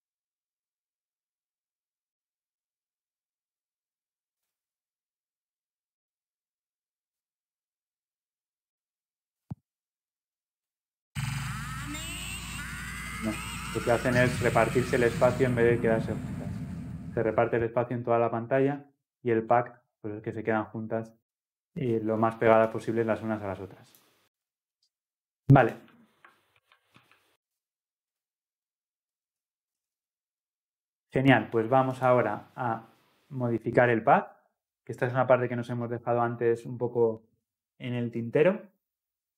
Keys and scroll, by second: 26.6 ctrl+z.